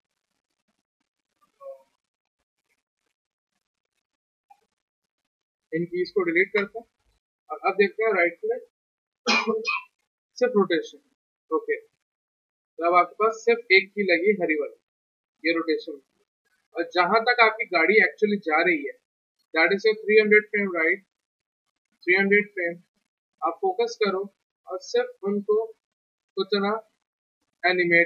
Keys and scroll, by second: 6.4 Delete, 22.8 z.